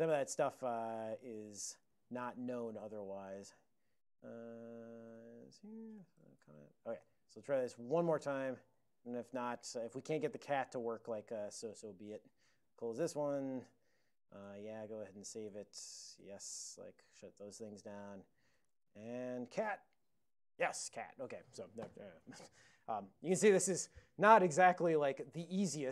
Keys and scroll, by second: 1.9 ctrl+a, 2.0 ctrl+n, 2.3 ctrl+space, 2.3 ctrl+n, 2.5 ctrl+n, 2.6 ctrl+c, 2.9 u, 5.7 alt+;, 6.4 ctrl+x, 9.3 super+j, 12.7 super+[, 18.5-19.6 typing.